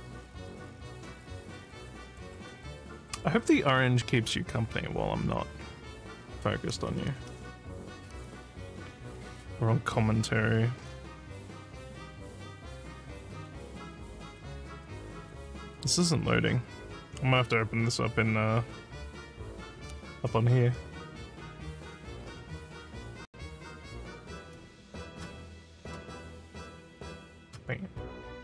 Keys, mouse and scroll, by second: 23.3-26.5 drag.